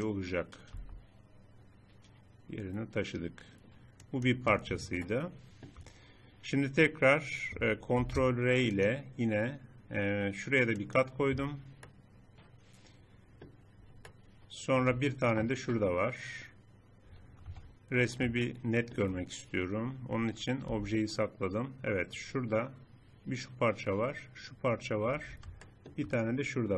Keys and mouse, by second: 0.7 g, 5.1 middle click, 8.1 ctrl+r, 11.9 click, 12.1 middle click, 12.9 middle click, 13.5 middle click, 14.1 middle click, 16.9 middle click, 17.5 Tab, 20.7 h, 25.9-26.7 middle drag.